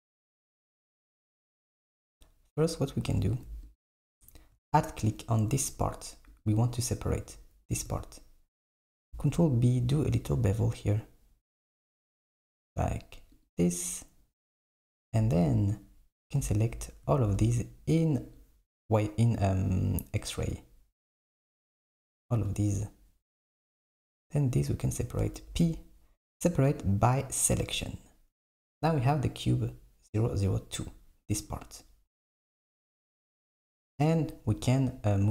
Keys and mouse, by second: 2.1-3.5 drag, 3.8 alt+click, 6.3-7.9 drag, 9.3 ctrl+b, 14.8 KP_7, 17.3 alt+z, 18.4 click, 25.4 p, 28.5 Tab, 29.5 click.